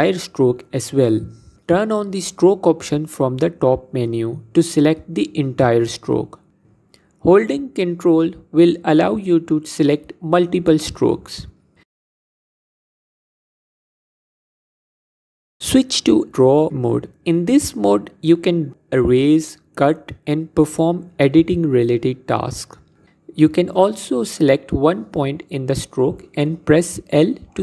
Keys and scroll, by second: 16.6 Tab, 27.5 l.